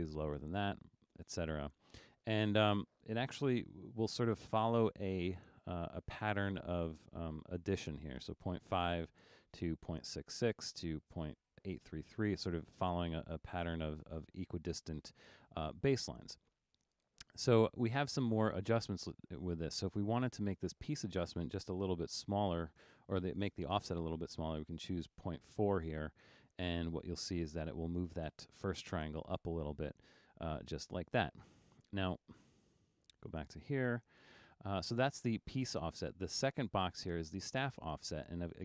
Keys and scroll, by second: 1.4 4, 3.8 1, 9.6 2, 11.2 3, 12.9-14.0 typing, 22.3 BackSpace, 24.9 4, 30.3 super+z.